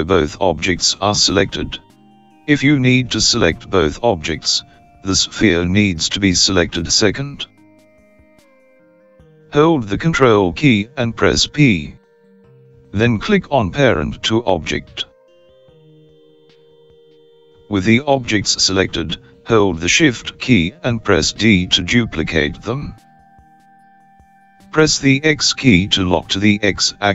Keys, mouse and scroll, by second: 0.1 shift+click, 10.2 ctrl+p, 20.5 shift+d.